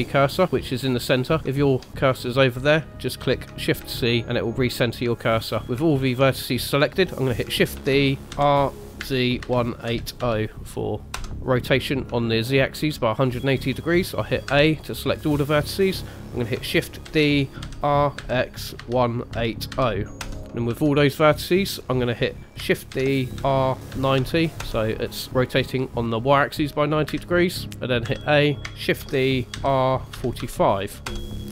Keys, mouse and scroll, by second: 1.5 shift+right click, 3.8 shift+c, 5.2 shift+middle click, 5.6 shift+middle click, 5.6 scroll down 1, 5.9 shift+middle click, 7.7 shift+d, 8.3 r, 12.3 shift+middle click, 14.5 a, 17.0 shift+d, 20.5 shift+middle click, 20.5 scroll down 2, 20.7 a, 22.9 shift+d, 25.3 middle click, 27.0 KP_1, 28.0 a, 29.0 shift+d.